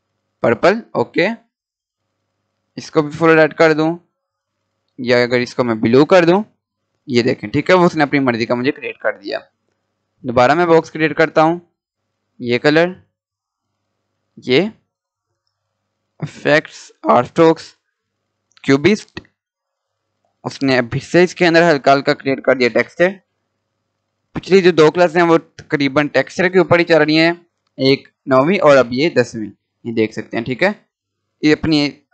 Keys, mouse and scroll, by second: 2.1 right click, 2.5 click, 5.1 right click, 5.9 click, 8.3 Delete, 10.0-21.9 drag, 28.8 scroll up 1, 29.8-30.5 scroll down 1, 30.5-32.1 drag.